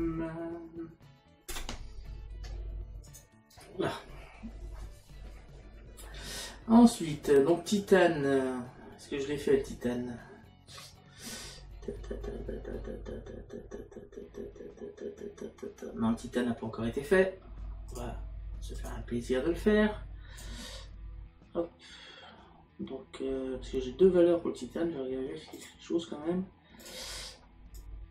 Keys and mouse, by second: 1.5 BackSpace, 3.1 click, 17.9 click, 21.7 middle click, 25.6 click, 26.8 click.